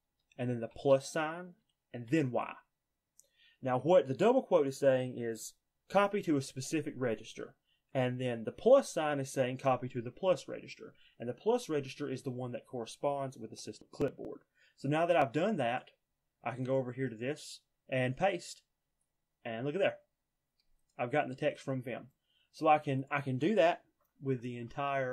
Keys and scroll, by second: 1.9 y, 23.9-25.1 typing.